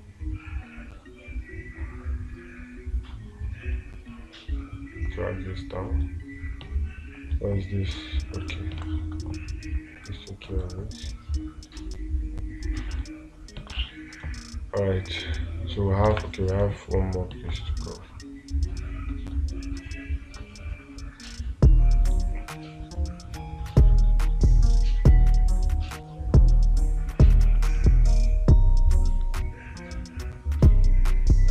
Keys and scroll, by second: 9.3 space, 14.2 space, 16.6 space.